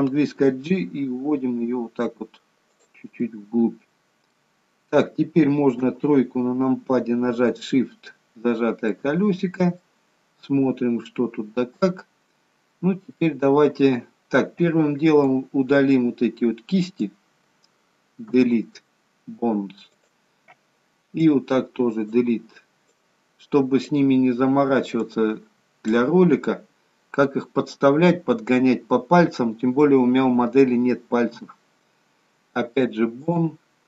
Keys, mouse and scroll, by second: 0.4 g, 3.2 middle click, 4.6-5.8 scroll down 2, 5.8-6.2 scroll down 1, 5.8 KP_3, 7.5 shift+middle click, 9.8 middle click, 15.3 click, 21.2 click, 22.9 click, 24.9 click, 31.3 Delete.